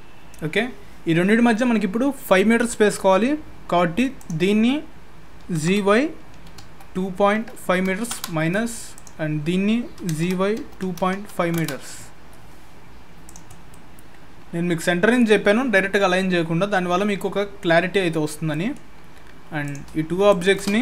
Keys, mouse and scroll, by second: 0.1-2.6 scroll up 4, 4.2 click, 5.4 g, 8.9 click, 10.0 g, 12.1-12.5 scroll down 5, 12.4-13.0 scroll up 4, 13.0 scroll up 1, 13.2 click, 13.5-14.2 scroll down 2, 13.7 middle click, 16.5-18.5 scroll up 3, 18.5 middle click, 19.6 click, 20.3 shift+click.